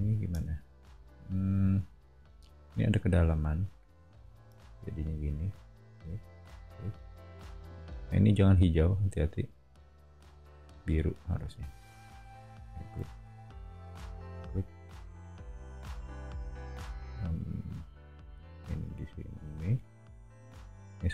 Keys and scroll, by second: 0.3 BackSpace, 4.1 l.